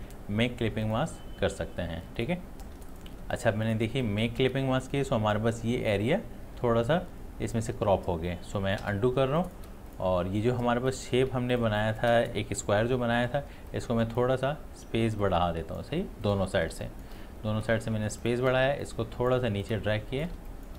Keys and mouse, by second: 0.8 click, 2.7 ctrl+space, 2.9 ctrl+click, 9.0 ctrl+z, 9.2 space, 9.4 click, 11.2 space, 11.5-15.2 ctrl+alt+drag, 15.6 click, 16.8 space, 16.9 click, 17.8 space, 18.3-20.4 ctrl+drag, 20.4 shift+space, 20.5 click.